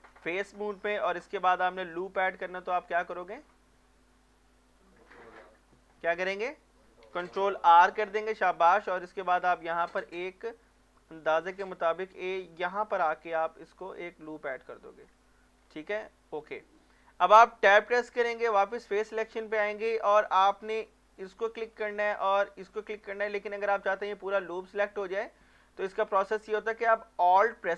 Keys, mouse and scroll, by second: 0.7 scroll up 1, 1.1 middle click, 2.2 scroll down 1, 2.5 middle click, 4.7 click, 5.3 middle click, 6.2-7.1 scroll up 1, 7.6 ctrl+r, 9.4 click, 9.6 click, 14.3 click, 14.8 middle click, 15.3 shift+middle click, 15.7 scroll up 1, 16.3-16.8 scroll down 1, 16.8 middle click, 17.8 Tab, 21.2 click, 21.7 scroll down 1, 22.1 middle click, 22.7 shift+click, 23.0-26.0 middle drag, 25.9 scroll up 1, 27.3 click.